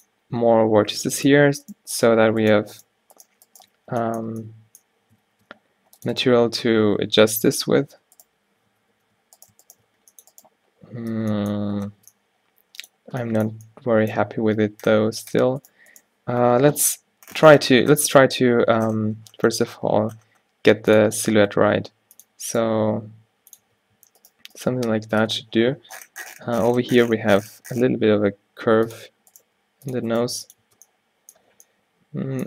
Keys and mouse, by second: 0.9 x, 3.9 f, 5.4 ctrl+r, 6.9 ctrl+t, 7.8 ctrl+z, 8.8 ctrl+z, 9.1 ctrl+z, 10.0 g, 11.2 f, 12.1 Tab, 14.5 Tab, 16.5 o, 17.0 g, 18.6 g, 21.3-26.1 drag, 21.8 g, 23.0 g, 23.8 Tab, 24.1 Tab, 24.8 g, 29.4 click, 29.6 g, 30.3 g, 30.7 Tab, 31.0 click.